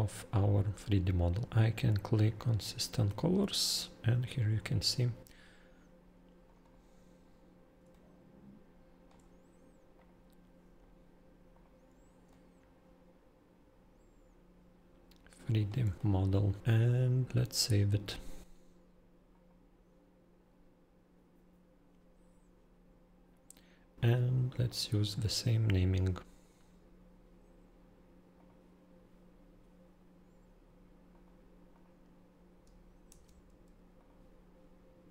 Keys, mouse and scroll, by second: 1.4 click, 2.4 click, 6.5 click, 6.7 click, 7.9-9.1 shift+middle click, 8.4 shift+middle click, 10.0 click, 11.5 click, 12.3 middle click, 12.4-15.7 shift+middle click, 12.9 shift+middle click, 13.0 shift+middle click, 14.5 middle click, 15.9 middle click, 16.0 shift+middle click, 16.1 shift+middle click, 16.4 shift+middle click, 16.4 scroll, 16.4 shift+middle click, 16.6 click, 19.4 click, 24.5 click, 24.6 click, 28.4 click, 31.1 click, 31.7 click, 33.1 ctrl+c, 34.0 click.